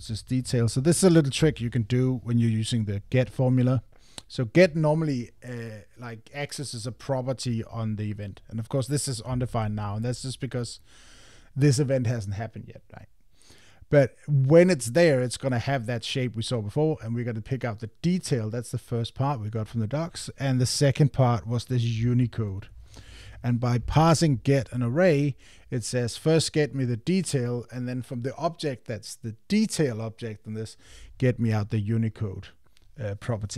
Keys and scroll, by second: 1.4 Tab, 23.3 Tab.